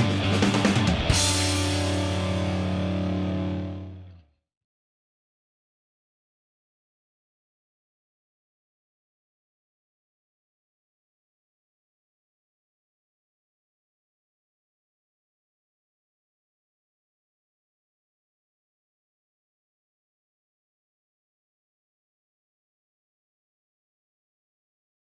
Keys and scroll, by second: 10.1 Escape, 12.1 space, 14.5 5, 15.2 Return.